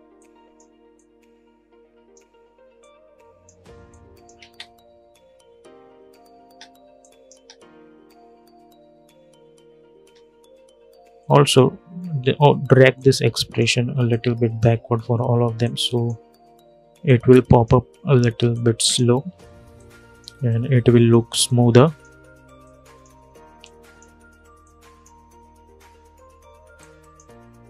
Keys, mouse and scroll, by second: 4.2 space, 6.1 space, 6.7 click, 7.1 space, 9.7 space, 13.0 click, 14.1 click, 15.7 click, 17.1 click, 24.9 scroll down 1, 26.5-27.6 drag.